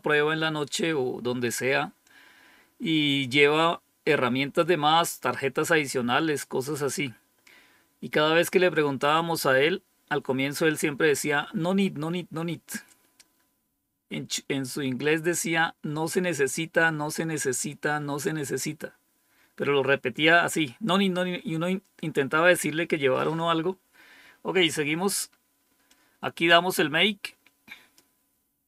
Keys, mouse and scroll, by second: 25.8-27.9 drag.